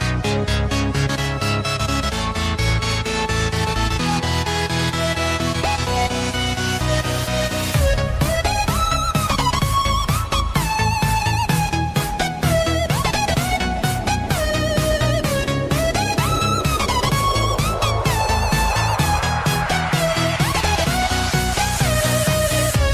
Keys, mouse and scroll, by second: 1.1 ctrl+z, 2.6 ctrl+l, 11.9 right click, 13.2 click, 14.2-14.8 scroll up 1, 14.8-16.6 scroll down 1, 16.6 click.